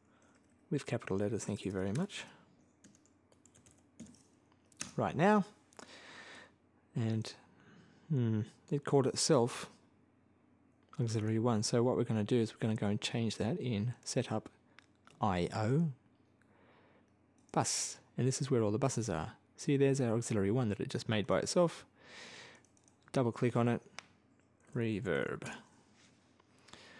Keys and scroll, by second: 1.2 BackSpace, 2.8-4.3 typing, 4.6 Return, 24.2-25.8 typing.